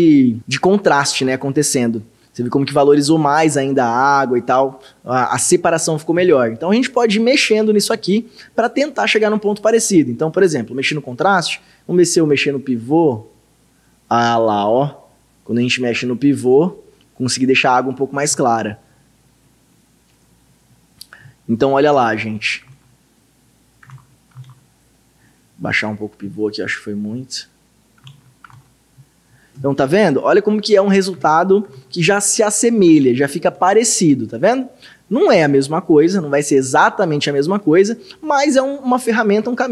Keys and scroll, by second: 22.1 ctrl+d, 23.9 ctrl+d, 28.1 ctrl+d, 31.2 ctrl+d, 31.8 ctrl+d, 33.0 ctrl+d.